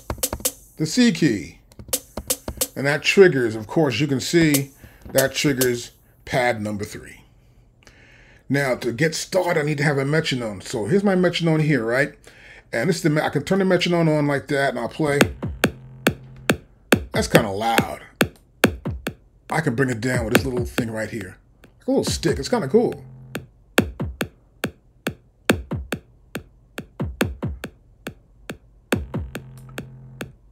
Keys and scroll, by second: 1.8 c, 4.4 c, 15.1 space.